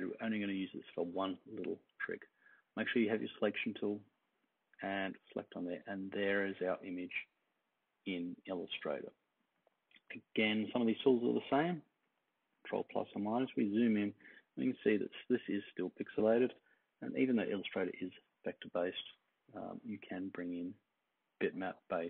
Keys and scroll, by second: 10.4 super+=, 10.8 super+=, 11.2 super+=, 11.4 super+=, 12.9 super+=, 16.7 super+-, 17.1 super+-, 17.5 super+-, 17.8 super+-.